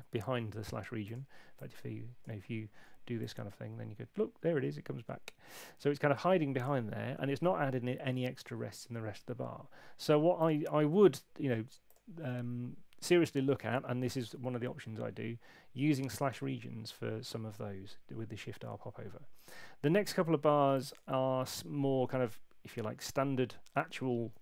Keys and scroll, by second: 11.0 [.